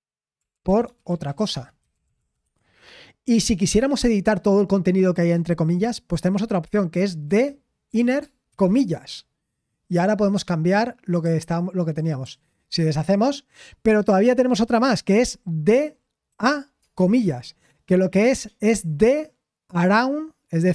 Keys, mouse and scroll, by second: 0.1-2.7 typing, 11.0-12.2 typing.